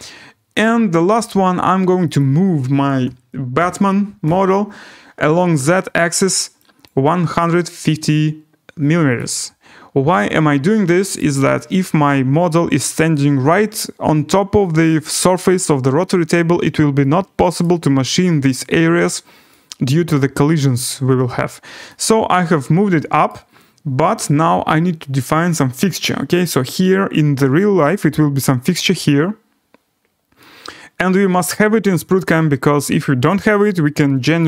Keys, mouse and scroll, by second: 1.2 click, 2.2 click, 3.0 1, 3.5 5, 4.2 0, 6.4 typing, 6.8 click, 9.1 click, 11.1 middle click, 11.3 right click, 11.3 scroll, 17.7 right click, 19.1 scroll, 20.6 right click, 21.1 scroll, 23.2 right click, 25.9 right click, 29.7 scroll, 29.8 right click, 31.4 right click.